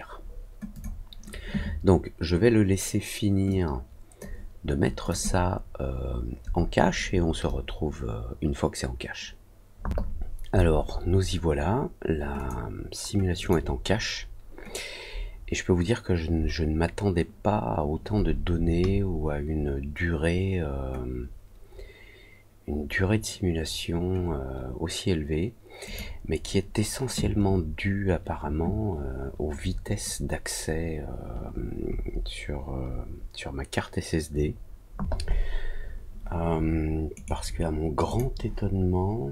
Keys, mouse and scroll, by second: 0.7 click, 5.0 click, 12.3 click, 13.3 click, 25.8 click, 37.1 right click, 38.0 click.